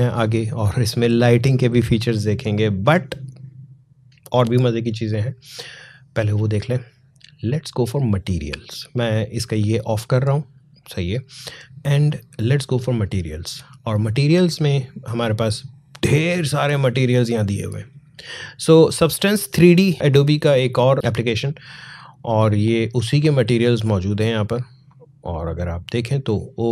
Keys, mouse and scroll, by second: 9.6 click, 14.5 scroll down 1, 23.1 click.